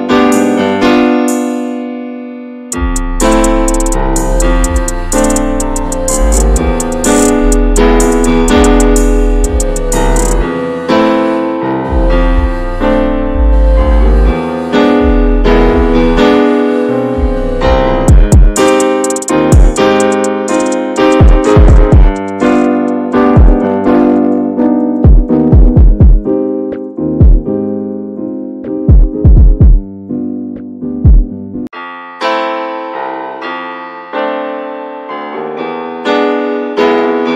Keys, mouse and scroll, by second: 0.8 alt+z, 1.1 middle click, 1.6 alt+z, 1.8 shift+middle click, 2.0-2.7 scroll up 3, 2.3 middle click, 2.8-3.9 shift+middle drag, 3.9 scroll up 1, 3.9-4.4 scroll down 12, 4.4 middle click, 4.6-5.6 scroll up 18, 5.6-7.1 middle drag, 7.1 x, 8.7 click, 9.1 alt+shift+click, 9.6 x, 10.1-10.6 scroll down 8, 10.6 middle click, 11.2-11.5 scroll down 8, 11.5 middle click, 12.1 shift+scroll up 1, 12.3 Tab, 12.4 click, 12.6 drag, 12.8 ctrl+a, 13.6 click, 13.7 scroll down 3, 13.9 alt+middle drag, 14.7 ctrl+s, 14.9 scroll down 3, 15.1-15.6 shift+middle drag, 15.6 scroll up 2, 15.7 Tab, 15.9 click, 16.2 shift+middle click, 16.8 3, 17.0 click, 18.5 2, 18.6 click, 19.1 alt+shift+click, 19.6 x, 20.5 3, 20.6 click, 20.9-21.7 scroll down 1, 21.7 s, 22.2-22.6 scroll down 1, 22.8 alt+middle click, 23.1-23.5 scroll down 8, 23.6 shift+middle click, 24.4 e, 27.6 shift+middle click, 27.7-28.9 scroll up 4, 28.0 middle click, 28.5 shift+middle click, 29.2-30.2 shift+middle drag, 30.2 s, 31.4 middle click, 31.5-32.0 scroll up 2, 31.6 shift+middle click, 32.0 s, 32.6 middle click, 33.0 r, 33.9 e, 34.8 shift+middle click, 35.0-35.4 scroll up 1, 35.4 click, 35.6 alt+shift+click, 35.9 alt+shift+click, 36.7 middle click, 36.9-37.2 scroll up 2, 37.2 e.